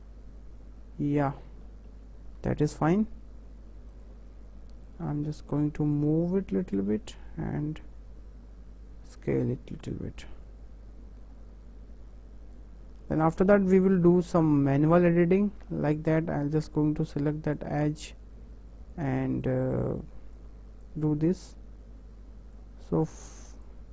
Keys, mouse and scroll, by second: 2.8 w, 4.0-5.0 drag, 6.0 click, 7.9 s, 10.0 click, 18.0 click, 19.5 click, 21.0 click, 21.4 click, 23.3 click, 23.7 click.